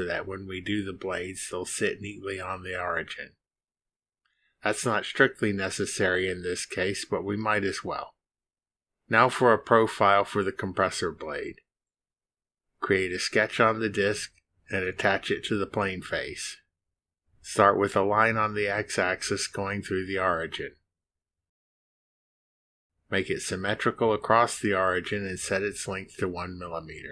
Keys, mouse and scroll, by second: 0.7 click, 4.8 2, 5.7 Return, 12.3 click, 14.6 click, 16.5 drag, 19.1 click, 20.3 click, 21.9 click, 22.7 click, 23.9 click, 24.7 click, 25.7 click.